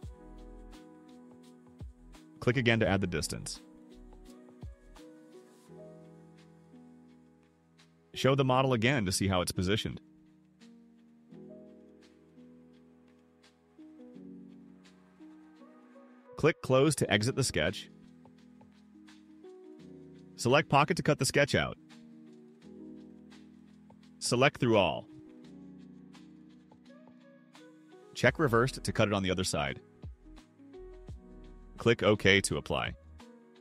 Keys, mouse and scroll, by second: 1.4 click, 3.1 9, 4.0 0, 4.9 Return, 9.2 click, 11.3 right click, 12.3 click, 13.6 click, 14.1 click, 18.1 click, 21.6 click, 23.1 click, 26.1 click, 29.2 click, 33.1 click.